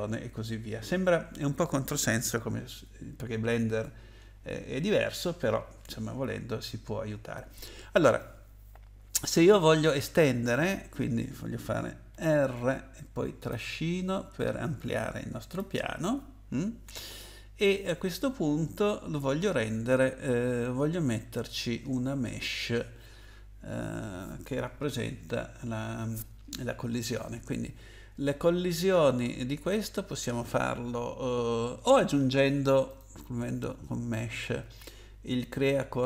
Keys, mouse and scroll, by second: 12.1 r, 13.5 click, 16.5-17.7 scroll down 2, 32.9 click.